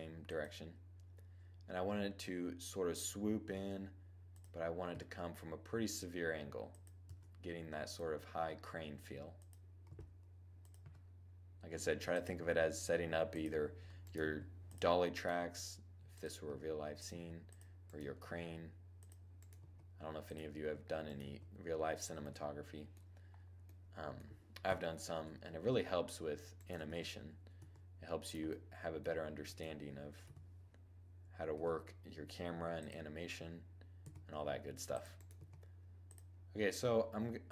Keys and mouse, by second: 2.9 e, 3.9-6.1 drag, 4.4 r, 6.3-13.5 drag, 6.6 e, 7.8 r, 9.3 g, 10.3 r, 11.8 g, 13.7 g, 14.8 g, 15.8 r, 16.5-17.7 drag, 16.5 g, 17.7 g, 19.0 g, 19.1 click, 19.2-21.8 right drag, 20.6-21.9 drag, 20.6 g, 21.6 middle click, 21.9-23.1 middle drag, 24.1 7, 26.0-27.0 middle drag, 26.3 Tab, 27.0 Tab, 28.2-30.2 drag, 29.7 7, 31.0 g, 32.9-34.1 drag, 33.4 g, 34.4 click, 34.8 g, 36.1-37.5 middle drag, 37.3 7.